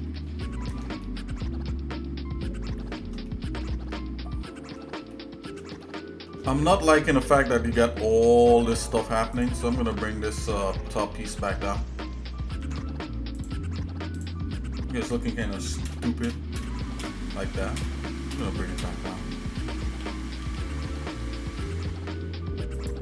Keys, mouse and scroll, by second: 1.0-3.0 shift+middle drag, 3.3 middle click, 3.9 shift+middle click, 5.1 shift+middle click, 5.8 shift+middle click, 6.6 middle click, 9.4 click, 9.8 Tab, 10.9 shift+middle click, 12.6 ctrl+Tab, 14.2 click, 14.7 shift+middle click, 15.9 ctrl+KP_Add, 16.3 ctrl+KP_Add, 16.6 ctrl+KP_Add, 17.0 ctrl+KP_Add, 17.9 ctrl+KP_Add, 18.3 ctrl+KP_Add, 18.8 ctrl+KP_Add, 20.0 g.